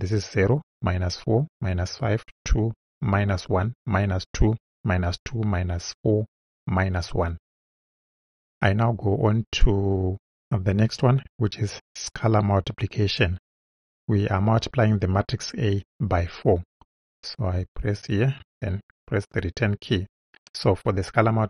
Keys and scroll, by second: 18.4 Return.